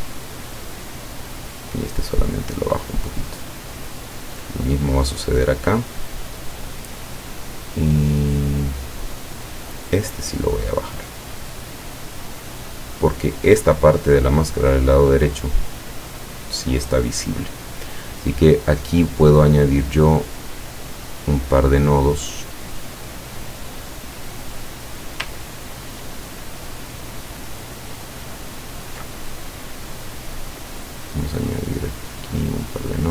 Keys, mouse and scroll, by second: 4.2-6.6 drag, 9.7-13.6 drag, 20.1 click, 23.5 click, 25.6-26.2 ctrl+scroll up 4, 26.6-27.2 ctrl+scroll down 2, 27.7 ctrl+scroll up 2, 30.5 click, 31.9 click.